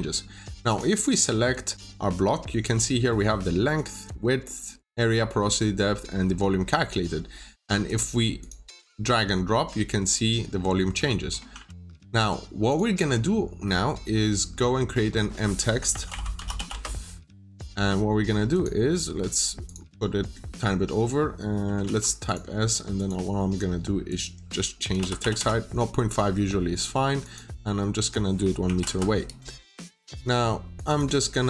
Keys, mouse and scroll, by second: 0.8 double click, 1.4 middle click, 1.7 scroll down 1, 6.6 scroll down 1, 6.8 middle click, 7.8 click, 11.5 ctrl+z, 12.6 click, 13.3 scroll up 1, 15.5-16.9 typing, 18.4 click, 21.7 typing, 22.1 click, 24.5-25.6 typing, 26.0-26.8 scroll up 1, 27.1 click, 28.5 typing, 29.8 click, 30.0 double click, 30.6 click.